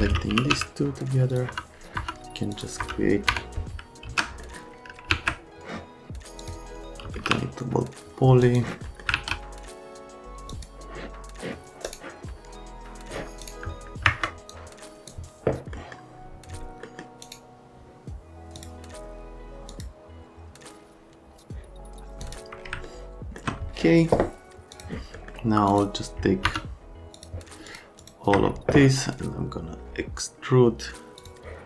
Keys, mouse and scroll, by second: 0.1-1.0 typing, 1.3 click, 1.5 F3, 2.0 F3, 2.8 F3, 3.3 F3, 4.1 alt+x, 5.1 alt+1, 6.7-7.7 typing, 9.1 alt+1, 14.1 Escape, 26.4 F3, 27.2 click, 27.7 ctrl+click, 28.0 ctrl+click, 31.2 click.